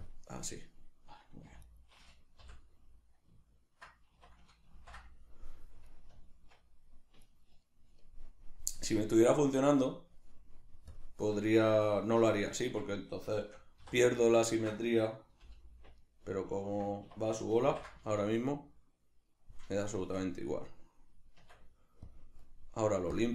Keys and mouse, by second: 1.5 3, 1.6 right click, 2.4 l, 4.2 1, 7.3 right click, 8.7 Tab, 10.9 click, 11.5-14.2 shift+middle drag, 13.8 3, 14.2 right click, 14.5-20.7 ctrl+middle drag, 15.4 l, 17.1 1, 17.6 ctrl+i, 20.7 right click, 21.4 Tab, 23.2 click.